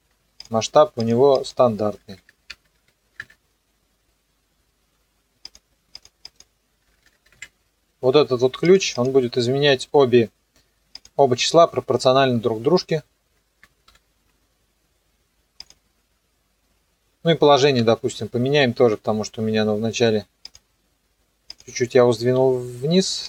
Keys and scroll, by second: 2.0 KP_1, 2.1 KP_0, 2.5 Tab, 2.8 KP_1, 3.2 KP_Enter, 6.8 KP_1, 7.0 KP_0, 7.3 KP_Enter, 13.9 shift+p.